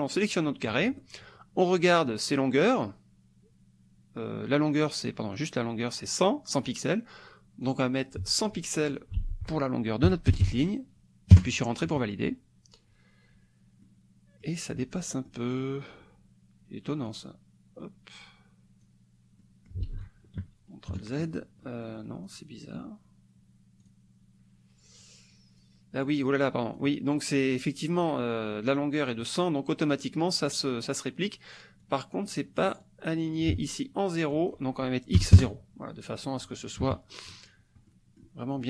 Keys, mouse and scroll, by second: 7.6 click, 8.9 ctrl+click, 9.2 ctrl+a, 10.3 KP_0, 11.3 KP_Enter, 13.8 click, 15.3 click, 17.1-19.0 drag, 19.4 click, 19.9 ctrl+z, 20.4 ctrl+KP_Subtract, 20.9 ctrl+KP_Add, 21.6 click, 22.2 click, 23.8 click, 25.1 click, 26.0 click, 31.9 click, 32.9 click, 34.3 click, 35.4 KP_Enter, 36.8 KP_Subtract, 37.9 scroll down 2, 37.9 click.